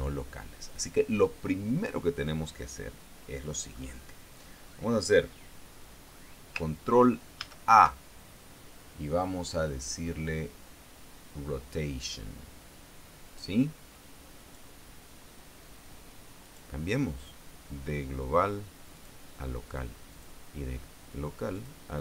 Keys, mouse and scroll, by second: 7.9 ctrl+a, 14.9 click, 17.0 click, 19.5 click, 20.7 click.